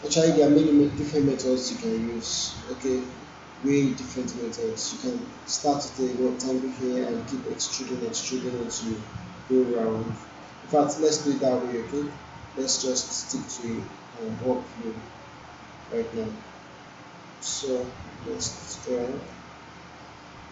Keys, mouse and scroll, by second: 11.9 click, 16.1-19.5 drag.